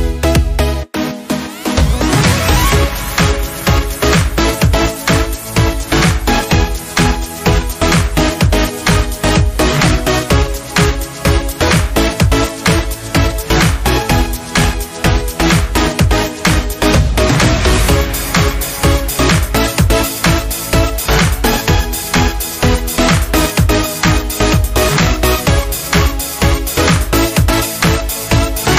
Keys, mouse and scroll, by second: 0.8 Up, 8.5-11.7 drag, 12.9 scroll down 1, 16.7-28.7 drag.